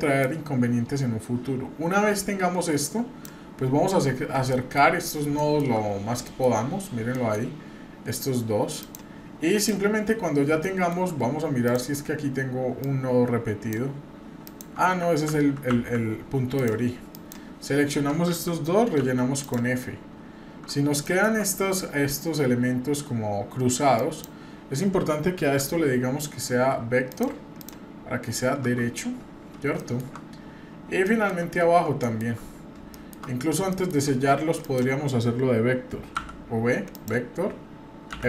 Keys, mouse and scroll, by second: 0.2-3.2 drag, 3.8 scroll up 1, 4.5 shift+middle click, 4.9-5.2 scroll up 2, 5.4 shift+middle click, 5.8-6.1 scroll up 1, 6.2 shift+middle click, 6.6-7.0 scroll up 2, 7.1 shift+middle click, 7.5 scroll up 1, 8.8 click, 9.5 click, 10.2 scroll up 1, 10.6 shift+middle click, 11.6 click, 12.8 click, 14.4 click, 15.2 ctrl+z, 15.7 ctrl+z, 16.5 click, 17.1 click, 19.0 f, 19.4 click, 20.2-20.9 scroll up 2, 21.0 shift+middle click, 21.4-23.4 scroll up 1, 23.9 click, 25.6 v, 27.6 click, 28.8-29.4 scroll down 5, 29.8 shift+middle click, 30.0-30.9 shift+scroll down 5, 31.0 shift+middle click, 31.5-31.9 scroll up 2, 32.0 shift+middle click, 32.4-32.8 scroll up 1, 32.9 shift+middle click, 33.3-33.6 scroll up 2, 33.7 shift+middle click, 34.0-34.6 scroll up 2, 34.6 click, 36.1 v, 38.1 f.